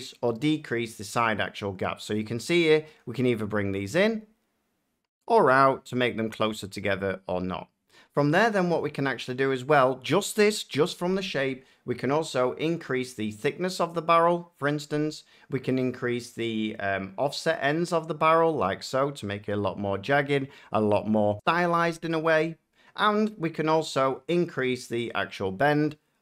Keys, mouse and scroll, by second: 6.4 shift+click, 14.6 click, 20.0 shift+click.